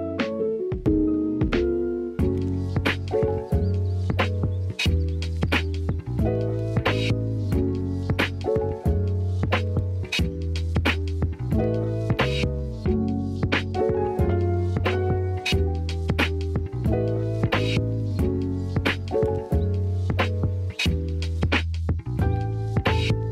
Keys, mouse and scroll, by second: 0.0 Tab, 0.2 Tab, 1.3 alt+z, 1.8-2.2 shift+middle drag, 4.8 shift+middle click, 6.2 shift+middle click, 9.4-10.5 shift+middle drag, 10.5 shift+a, 12.1 g, 12.5 click, 12.8 s, 13.7 shift+middle click, 14.7 alt+z, 16.0 Tab, 16.6 Tab, 16.9 s, 22.2-22.7 drag, 23.1 shift+middle drag.